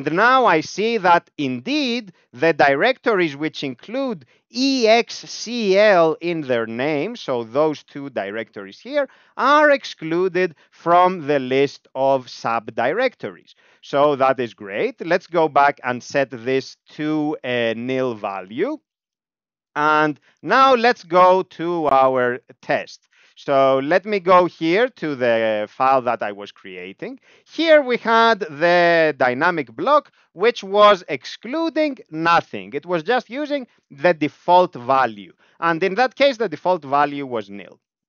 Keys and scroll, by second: 4.0 Tab, 4.5 Right, 4.7 Right, 5.0 Right, 5.2 Right, 5.8 Right, 6.1 Right, 6.4 Left, 6.6 Left, 6.7 Left, 7.2 Down, 7.4 Up, 7.7 Down, 7.9 Up, 13.4 Up, 13.6 Up, 13.8 Up, 13.9 Up, 14.1 Up, 14.2 Up, 14.4 Up, 14.5 Up, 14.7 Up, 14.8 Up, 15.0 Up, 15.2 Down, 15.4 Down, 15.7 End, 15.9 Left, 17.7 alt+BackSpace, 18.2 BackSpace, 18.5 ., 18.8 ., 19.1 End, 19.7 ctrl+e, 21.4 Down, 22.2 Tab, 22.5 Down, 22.6 Down, 22.8 Down, 23.0 Down, 23.1 Down, 23.3 Down, 24.5 Return, 25.2 Up, 25.3 Up, 25.6 Up, 25.6 Up, 25.8 Up, 26.1 Up, 26.1 Up, 26.3 Up, 26.4 Up, 26.6 Up, 26.7 Up, 27.1 Down, 27.6 Down, 27.7 Down, 28.1 Up, 28.3 Down, 28.5 Down, 28.9 Down, 29.0 Down, 29.2 Down, 29.4 Down, 29.5 Down, 29.7 Down, 37.6 Return.